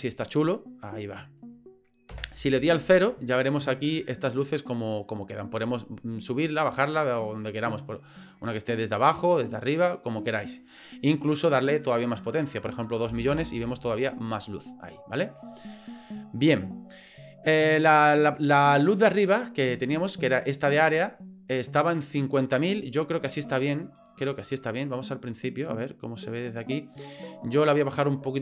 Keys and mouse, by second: 0.3-1.4 middle drag, 2.1 KP_0, 4.4-5.5 drag, 8.3-10.6 drag, 11.5-14.0 drag, 16.0 click, 21.6-25.4 drag, 25.7-26.7 drag.